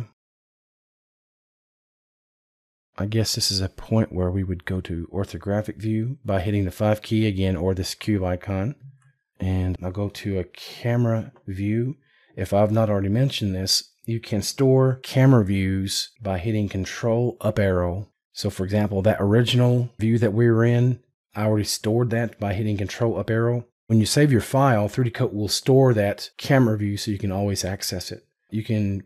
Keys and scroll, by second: 17.6 ctrl+Up.